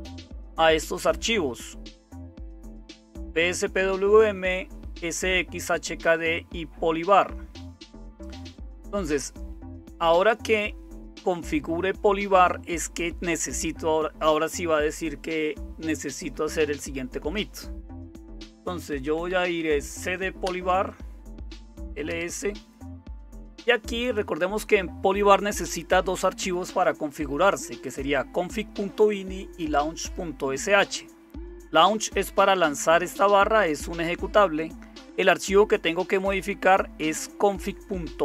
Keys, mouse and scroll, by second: 0.0-38.2 typing, 20.4 Return.